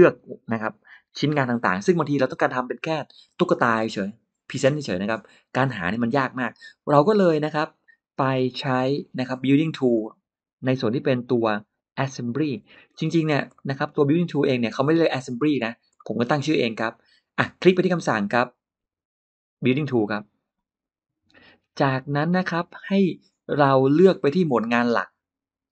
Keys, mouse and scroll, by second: 9.8 click, 11.1-12.2 drag, 12.4 scroll, 12.8 middle click, 13.0 scroll, 13.4 middle click, 13.7 scroll down 1, 14.5 click, 15.4 scroll up 1, 15.8 middle click, 16.2 middle click, 20.0 click, 25.5 click.